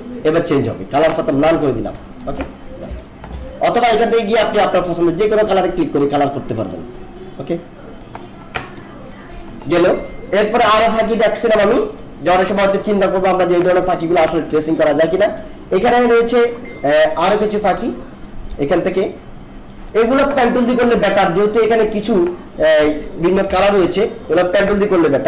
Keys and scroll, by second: 23.4 ctrl+=.